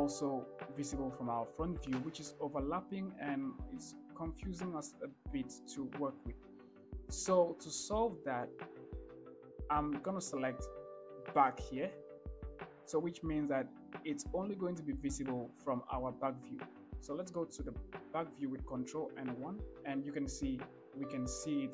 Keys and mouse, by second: 1.8-19.0 drag, 19.3 ctrl+KP_1.